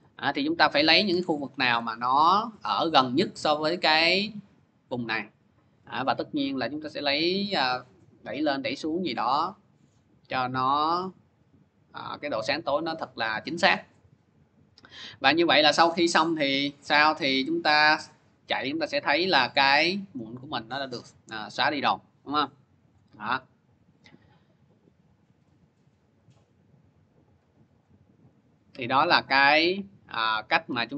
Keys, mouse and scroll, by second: 1.1 ctrl+z, 1.6 ctrl+z, 1.7 middle click, 4.8 click, 5.2 middle click, 5.6 scroll, 10.3 middle click, 12.5-15.4 middle drag, 15.4 scroll, 16.0 middle click, 18.4 scroll up 1, 22.7 click, 25.5 click, 26.1 click, 27.6 click, 28.0 scroll, 28.9-30.5 scroll.